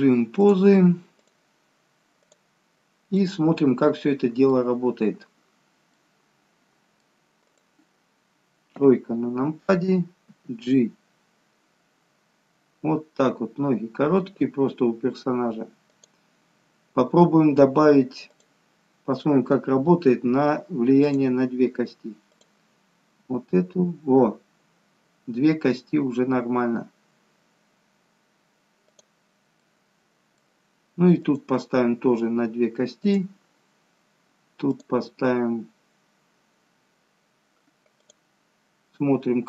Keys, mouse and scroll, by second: 0.3 click, 1.3 click, 3.0 scroll down 1, 3.3 middle click, 7.6 click, 8.8 KP_3, 10.3 g, 21.1 click, 22.3 click, 23.2 g, 31.3 click, 33.2 click, 38.0 click.